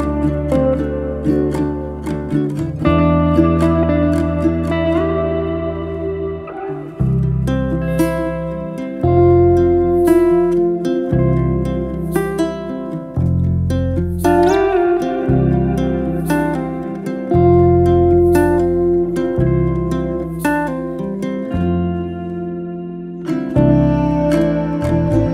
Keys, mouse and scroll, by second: 3.9 click, 5.0-7.1 drag, 9.8-11.2 drag, 13.6-14.6 drag, 14.9 click, 16.0 Tab, 17.2 3, 17.4 click, 17.8 click, 18.8-21.4 drag, 23.0-24.5 drag, 24.7 Tab.